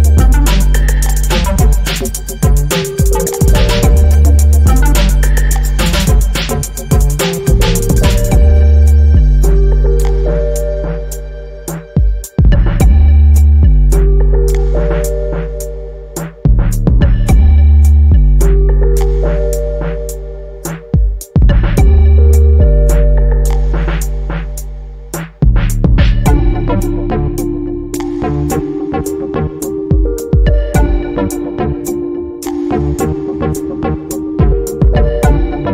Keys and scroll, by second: 6.4 Return, 7.7 n, 8.7 e, 9.1 space, 11.1 space, 11.5 a, 12.0 r, 22.6 Return, 23.6 c, 26.7 i, 27.1 Return.